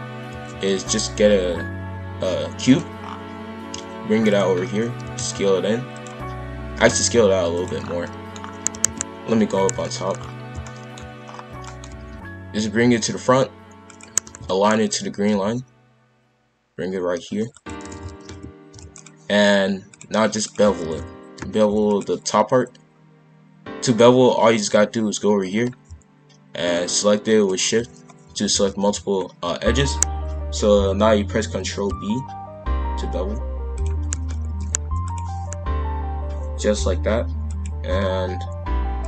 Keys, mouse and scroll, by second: 0.5 shift+a, 3.0-3.5 scroll down 2, 3.5 g, 4.5 scroll up 1, 5.0 s, 6.6 s, 7.8 scroll down 1, 8.0 middle click, 8.4-8.7 scroll down 1, 8.7 KP_5, 8.8 KP_1, 9.8 shift+middle click, 10.1-10.5 shift+scroll up 2, 10.6 shift+middle click, 11.2-11.6 scroll up 2, 11.6 shift+middle click, 11.9 g, 14.2 KP_5, 14.6-15.3 scroll up 1, 15.3 g, 17.8 shift+f, 19.9 click, 20.8 shift+f, 23.8 click, 27.4 shift+click, 28.4 shift+f, 31.7 ctrl+b, 34.4 shift+f, 37.4 click.